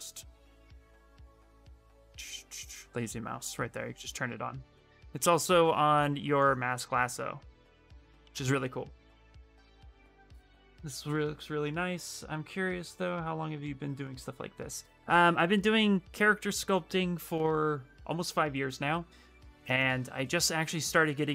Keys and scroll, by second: 8.0 ctrl+z.